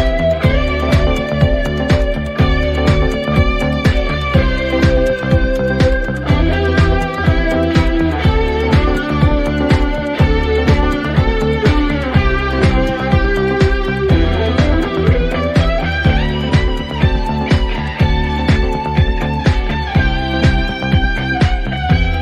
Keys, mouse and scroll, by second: 3.3 click, 4.1 click, 7.0 click, 7.7 1, 8.1 Return, 9.7 click, 10.4 2, 10.7 Return, 12.8-14.3 drag, 13.4 Return, 15.4 click, 18.3 click, 21.1 click.